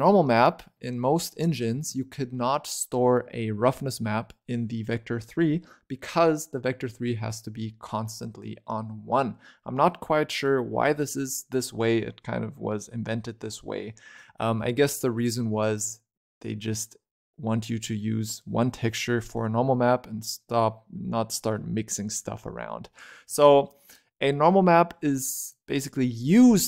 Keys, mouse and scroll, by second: 1.6 scroll down 2, 1.8-3.1 shift+middle drag, 3.1-6.2 scroll up 4, 13.7-14.1 scroll up 7, 14.1-17.6 scroll down 6, 25.4 click.